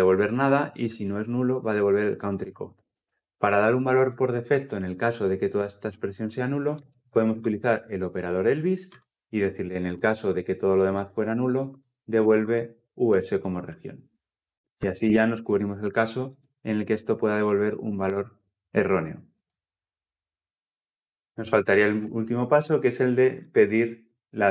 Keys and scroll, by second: 14.7 ctrl+alt+l, 14.9 ctrl+alt+o, 22.3 alt+Return.